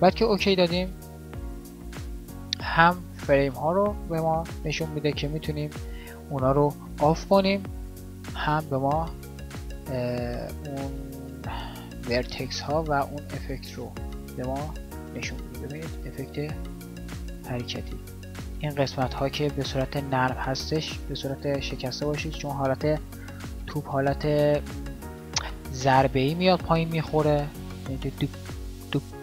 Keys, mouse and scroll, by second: 10.2-18.2 drag, 18.4 click.